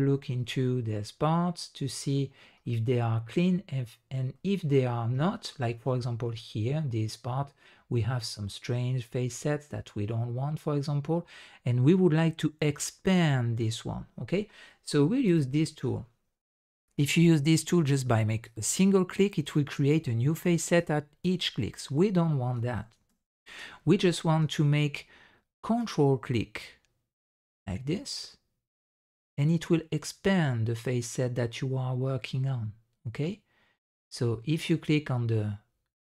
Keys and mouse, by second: 0.4 shift+drag, 0.8-2.1 middle drag, 2.6-3.8 middle drag, 4.3-4.8 middle drag, 5.1 shift+drag, 5.9 shift+drag, 15.2 click, 18.4 click, 19.8 drag, 20.7 drag, 22.8 ctrl+z, 23.0 ctrl+z, 23.3 ctrl+z, 25.7 ctrl+click.